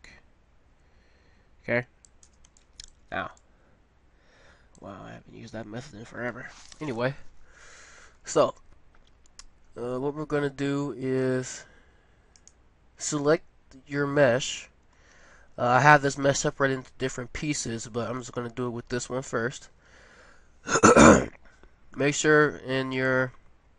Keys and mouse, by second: 2.6-4.6 middle drag, 11.2-12.3 middle drag, 12.3-14.1 drag, 15.1 middle click, 23.0-23.7 middle drag.